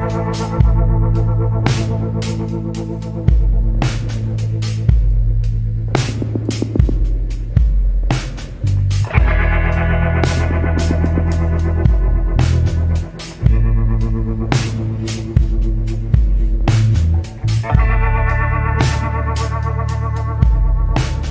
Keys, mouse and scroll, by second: 0.0 scroll up 1.